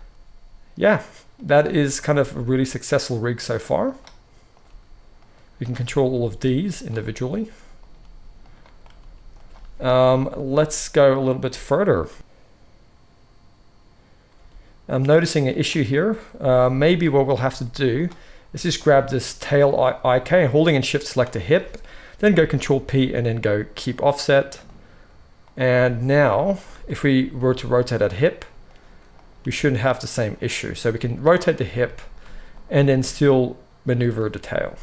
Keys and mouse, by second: 1.9 click, 2.0-4.4 middle drag, 2.1 g, 4.4 click, 4.5-5.5 middle drag, 4.6 g, 5.5 click, 5.6-7.7 middle drag, 6.1 g, 7.7 click, 7.8-17.5 middle drag, 7.9 g, 8.9 g, 16.4 r, 17.5-18.7 drag, 18.7-21.0 shift+middle drag, 21.0 shift+click, 21.1-24.4 shift+middle drag, 22.2 ctrl+p, 24.4-26.5 drag, 26.5-29.1 middle drag, 27.3 r, 29.1 click, 29.2-30.4 middle drag, 29.3 g, 30.4 click, 30.8-32.4 middle drag, 30.8 r, 32.4 click, 32.5-34.8 middle drag, 32.8 g, 34.1 r.